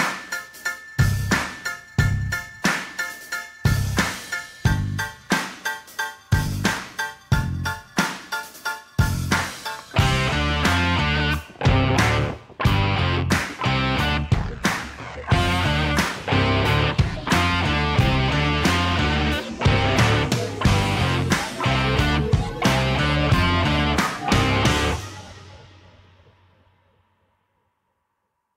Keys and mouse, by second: 0.8 g, 0.9 z, 2.7 shift+click, 3.2 click, 5.3 g, 5.3 z, 6.6 click, 7.0-7.9 middle drag, 8.8-10.6 middle drag, 10.7 Tab, 11.2 shift+middle drag, 11.9-13.0 drag, 13.6-14.5 middle drag, 15.3 click, 15.9 middle click, 17.3 shift+d, 17.8 g, 17.9 z, 19.8-20.9 middle drag, 21.7-22.2 shift+middle drag, 22.6 click, 23.8 g, 23.8 z, 26.4 middle click, 26.9 click, 27.4 middle click, 28.2 g, 28.3 z.